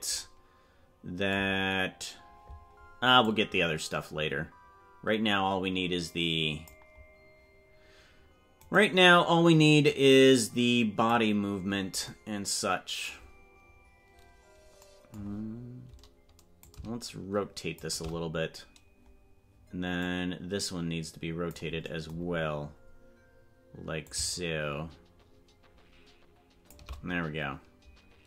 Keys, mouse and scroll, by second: 3.3-6.8 drag, 9.9 click, 13.7-14.0 scroll down 3, 16.6-17.8 drag, 20.1-21.6 drag, 22.2 scroll down 2, 23.1 scroll down 2, 24.0-26.7 shift+drag.